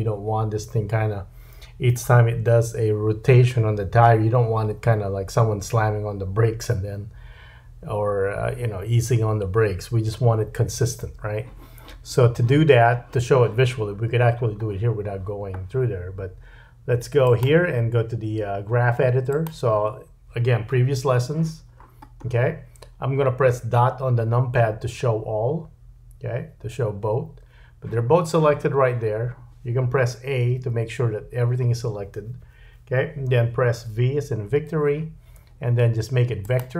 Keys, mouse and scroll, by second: 10.2 space, 17.2 click, 21.7-22.6 scroll down 6, 22.5-25.3 scroll up 4, 26.4 KP_Decimal, 30.5-33.7 scroll up 1, 30.5 a, 33.7-34.5 scroll up 1, 34.5 v.